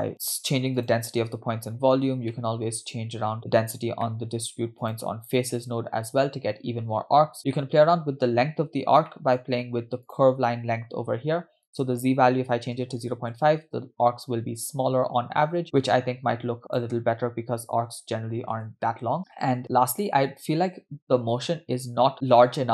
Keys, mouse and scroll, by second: 0.1-0.6 scroll up 5, 0.8 click, 1.9-2.3 scroll down 3, 2.4-3.4 middle drag, 4.1 middle click, 4.4-4.7 scroll up 2, 4.8 click, 7.5 scroll down 1, 7.6 middle click, 9.1 middle click, 10.1 click, 10.9-11.3 scroll up 2, 11.7-13.3 drag, 15.2 space, 16.3 space, 16.7-18.6 drag.